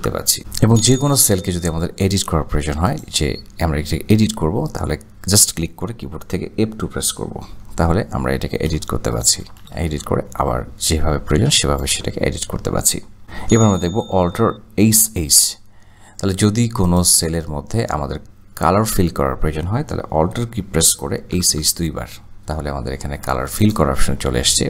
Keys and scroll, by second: 7.6 F2, 8.7 BackSpace, 8.9 BackSpace, 9.2 BackSpace, 9.3 BackSpace, 21.5 alt+h.